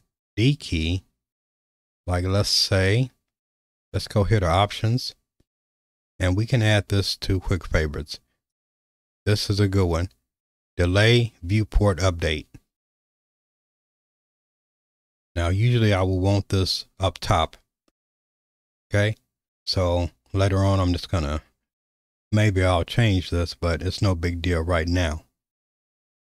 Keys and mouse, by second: 3.9-12.6 drag, 13.6 q.